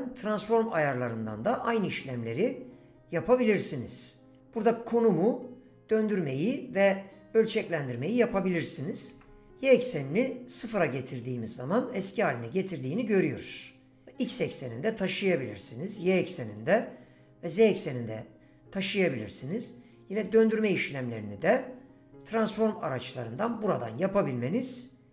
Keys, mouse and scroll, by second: 0.9 n, 8.1 click, 13.7-15.1 drag, 15.9 click, 17.1-19.1 drag, 19.9 click, 21.5 click, 22.7 click, 24.1 click.